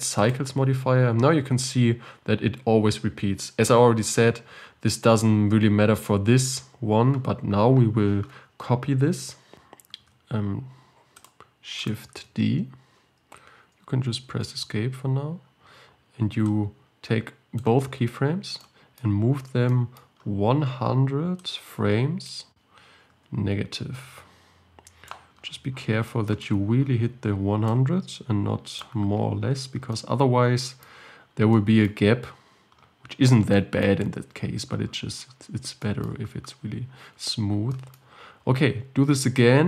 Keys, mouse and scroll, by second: 9.3 scroll up 1, 11.3 click, 11.9 click, 12.3 shift+d, 16.5-24.6 drag, 27.7-29.3 drag, 29.3-29.9 scroll up 7, 29.9-31.1 shift+middle drag, 31.1-31.5 scroll up 3, 31.5-32.7 shift+middle drag, 32.7-33.5 scroll up 5, 33.5 scroll up 1, 33.6-34.9 shift+middle drag, 34.9-35.8 scroll down 12, 35.8-37.1 shift+middle drag, 37.1-37.7 scroll down 4, 37.7-39.3 shift+middle drag, 39.3 shift+d.